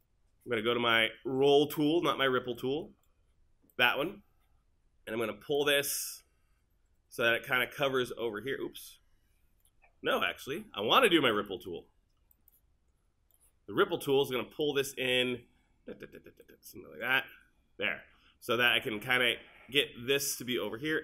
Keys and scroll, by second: 10.4 super+z.